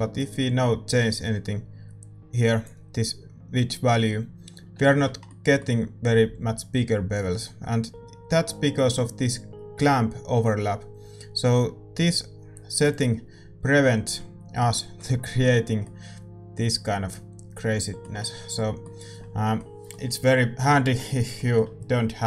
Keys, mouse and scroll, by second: 0.5-1.9 drag, 4.5-13.2 middle drag, 13.2-14.9 drag, 13.7-18.0 middle drag, 18.1-18.5 scroll up 1, 18.5-22.2 middle drag.